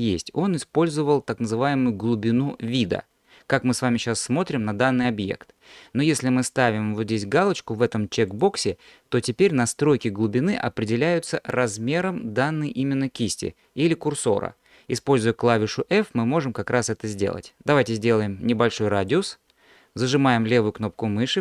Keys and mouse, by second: 8.3 click, 15.5 f, 20.4-21.4 drag.